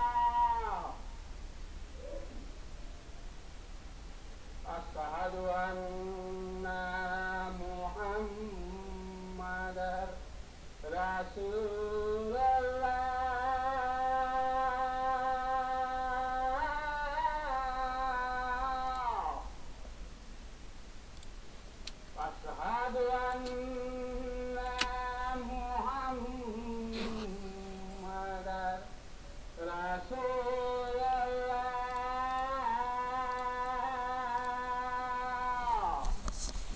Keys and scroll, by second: 22.5 ctrl+space, 23.9 ctrl+space, 24.7 ctrl+s.